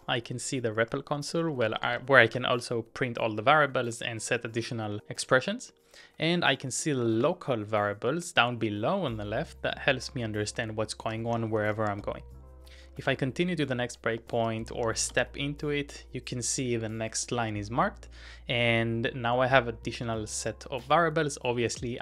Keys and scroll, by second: 0.0-2.9 typing, 7.1 ctrl+w, 7.2 l, 8.9 j, 10.8-14.3 typing, 14.8 Up, 15.1 Return.